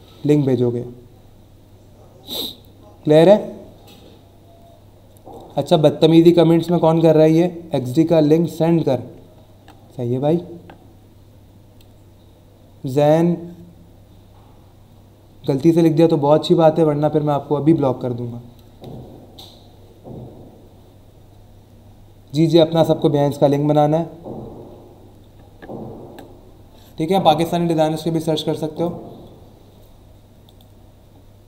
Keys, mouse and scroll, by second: 28.7 click, 30.4 click.